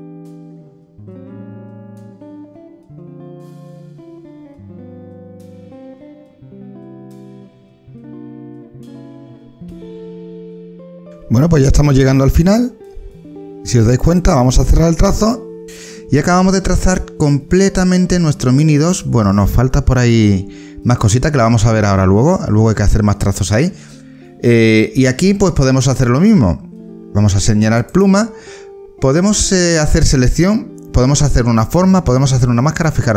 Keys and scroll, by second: 0.0-3.4 typing, 3.8 ctrl+z, 4.7 ctrl+\, 4.9 h, 6.0 ctrl+z, 6.3-10.9 typing, 6.7 ctrl+z, 8.9 ctrl+z, 9.0 ctrl+z, 10.3 ctrl+z.